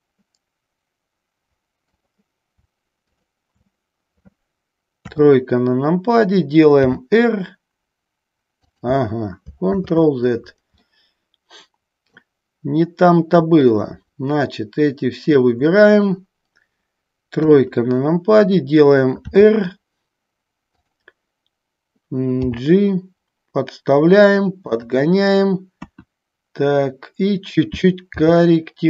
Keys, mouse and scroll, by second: 3.1 shift+click, 5.2 KP_3, 7.0 r, 8.8 click, 9.8 ctrl+z, 11.0-12.4 middle drag, 13.9-15.7 shift+drag, 17.5 KP_3, 19.5 r, 24.9 click, 25.9 KP_1, 28.1 g.